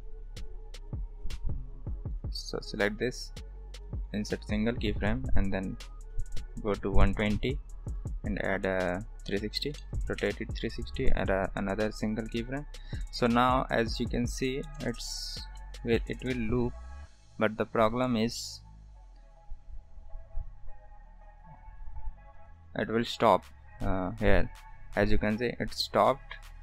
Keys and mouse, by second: 2.6 click, 3.7 right click, 4.3 click, 5.6-8.0 drag, 8.7-11.8 drag, 13.0-14.7 drag, 14.8 space, 15.7 shift+middle drag, 16.0 middle click.